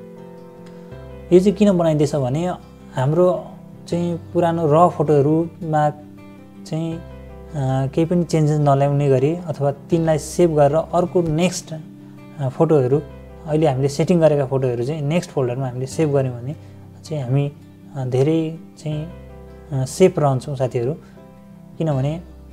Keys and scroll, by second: 0.0-0.3 typing, 2.9 BackSpace, 4.7-7.7 typing, 16.7 =, 19.2 -.